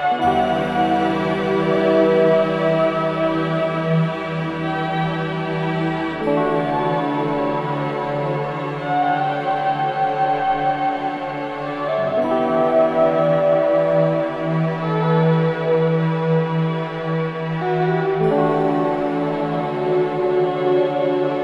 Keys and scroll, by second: 0.1 ], 1.0 4, 2.7 ctrl+z, 5.8 3, 10.3 ], 10.8 ], 13.6 4, 15.3 3.